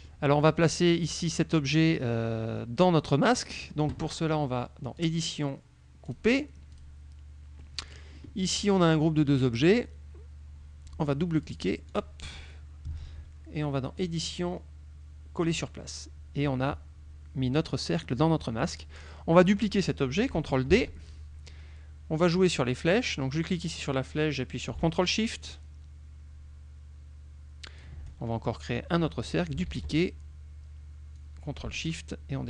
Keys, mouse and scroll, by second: 5.1 click, 6.2 click, 6.8 click, 7.7 middle click, 11.4 click, 12.0 click, 14.1 click, 15.4 click, 20.8 ctrl+d, 23.2-28.0 drag, 29.7 ctrl+d, 31.2-32.4 drag.